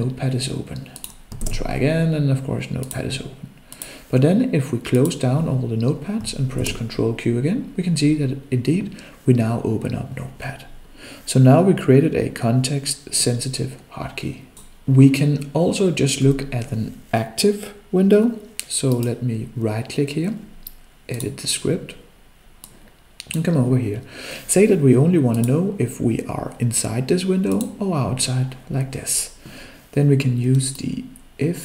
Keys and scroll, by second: 6.6 ctrl+q.